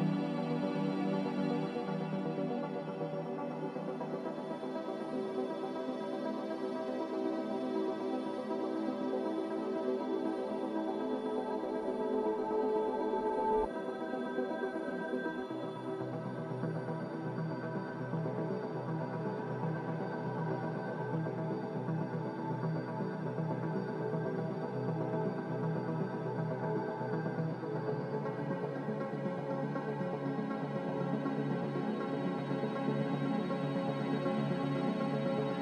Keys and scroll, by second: 16.5-17.9 typing.